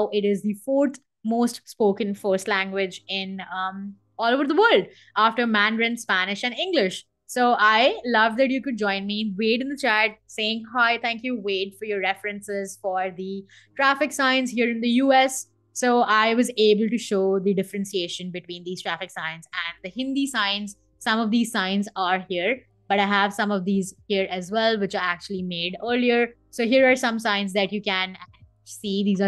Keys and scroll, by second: 18.6 super+Tab.